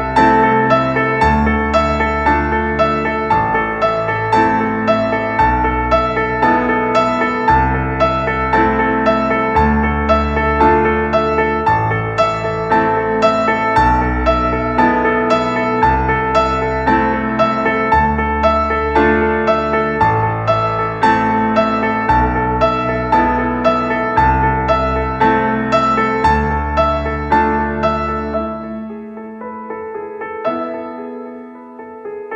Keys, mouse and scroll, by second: 0.9-1.5 drag, 1.8 g, 2.6 middle click, 3.2 g, 4.4 middle click, 5.7-9.1 drag, 10.4 g, 15.6 KP_0, 16.3-17.2 drag, 19.2-20.0 drag, 20.1 ctrl+super+KP_0, 21.0 click, 21.2 click, 22.2-24.0 drag, 24.2-24.8 drag, 24.8-25.2 middle drag, 25.2-26.1 drag, 26.1-28.0 middle drag, 28.0-28.6 drag, 28.6 middle click, 29.1 KP_0, 31.2 click, 31.8 middle drag.